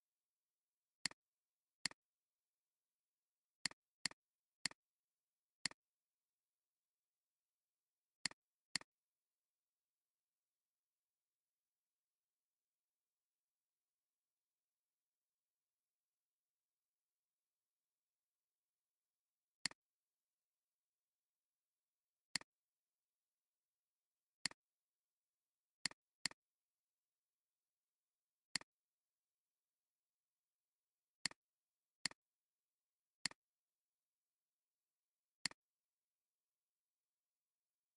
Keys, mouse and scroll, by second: 1.9 right click, 4.0 double click, 4.4 space, 5.2 alt+scroll down 2, 5.5 space, 6.0 space, 6.5 alt+scroll up 2, 8.0 space, 19.2 alt+scroll down 1, 19.5 space, 20.1 space, 21.5 alt+scroll down 2, 21.7-22.3 alt+scroll up 2, 22.8 space, 26.2 double click, 29.3 alt+scroll up 1, 32.6 alt+scroll down 1, 34.8 alt+scroll up 1, 35.2 space, 37.1 alt+scroll up 1, 37.6 space.